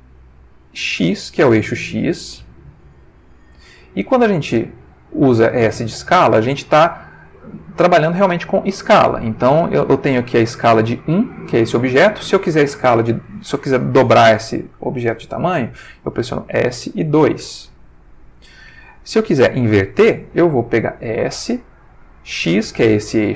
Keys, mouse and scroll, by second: 1.0 x, 10.7 Escape, 16.5 s, 17.4 2, 18.6 Escape, 21.3 s, 22.4 x.